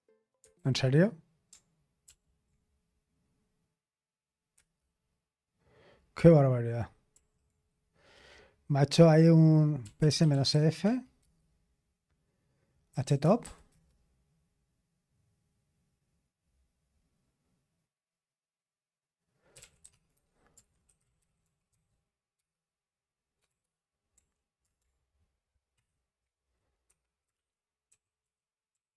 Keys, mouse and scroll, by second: 0.5 super+h, 2.0 ctrl+p, 4.5 Return, 9.9 super+l, 10.5-10.8 typing, 12.6-13.7 typing, 19.4-22.3 typing, 23.4-24.1 typing, 25.7 ctrl+v, 26.8 Escape, 27.1-28.9 typing.